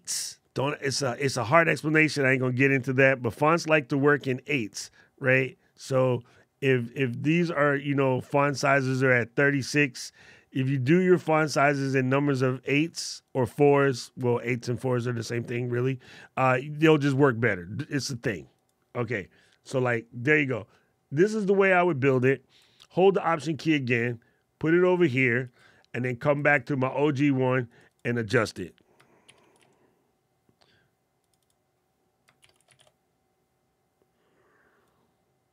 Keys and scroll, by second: 29.0 shift+d, 32.2 shift+r.